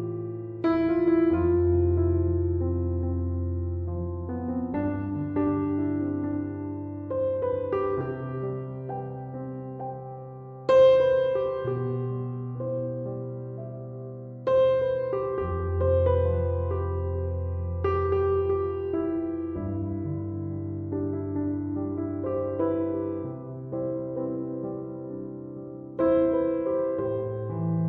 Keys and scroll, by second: 0.7 Escape, 13.6 Return.